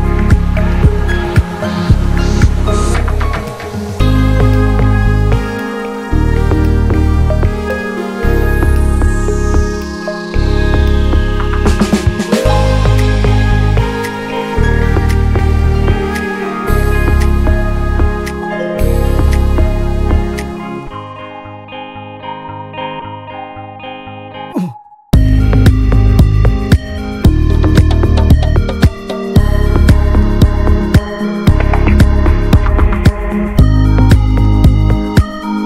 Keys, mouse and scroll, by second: 2.9-4.7 drag, 4.7 ctrl+z, 5.7-6.7 drag, 8.4 right click, 8.9 alt+middle click, 9.1-10.0 scroll up 2, 9.4 middle click, 10.1 alt+middle click, 10.6-11.5 scroll up 1, 11.5 Tab, 13.6-14.7 middle drag, 14.7-19.1 right drag, 19.1 Tab, 19.9 middle click, 20.2 alt+h, 20.6-21.6 middle drag, 21.6 click, 21.6-22.7 middle drag, 22.7 Tab, 23.1 click, 23.2 l, 23.6 shift+h, 24.2-25.6 middle drag, 25.6 Tab, 26.2 alt+middle click, 26.4 alt+middle click, 26.5 scroll up 2, 30.1 right click, 30.6-31.1 scroll up 1, 31.1-34.0 right drag, 34.0-35.6 drag.